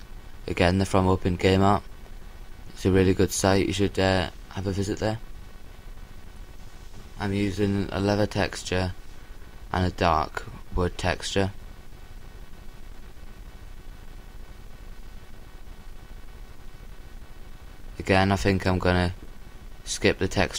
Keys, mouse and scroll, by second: 4.7-6.2 drag, 7.8-9.3 middle drag, 13.2-17.9 drag.